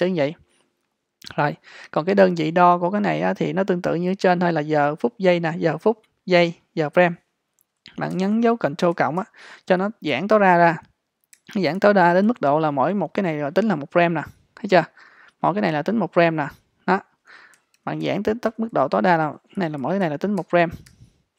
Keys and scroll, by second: 8.2 super+=, 11.4 super+-, 17.6 super+=, 19.6 super+-.